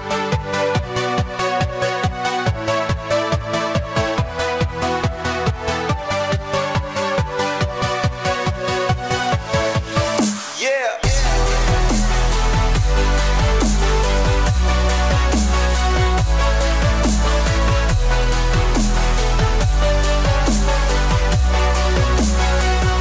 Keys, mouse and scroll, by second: 0.6 middle click, 1.8 middle click, 5.7 middle click, 6.9 scroll up 1, 7.2 middle click, 8.6 k, 9.3-9.9 scroll up 3, 9.5 middle click, 12.1 scroll up 1, 16.1 middle click, 17.4 middle click, 18.2 middle click, 18.3 k, 18.6 scroll down 2, 19.9-20.4 scroll down 4, 20.9 scroll up 2, 22.2 scroll up 2, 22.7 middle click.